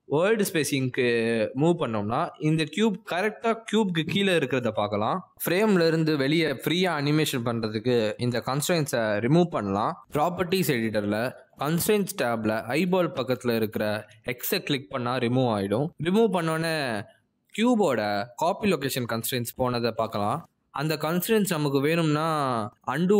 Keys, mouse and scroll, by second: 0.1 middle click, 0.9 shift+middle click, 1.3 click, 1.7 shift+middle click, 2.2 click, 4.1 middle click, 11.1 middle click, 11.5 shift+middle click, 19.9 click, 20.9 middle click, 22.0 g, 22.3 middle click, 23.0 middle click.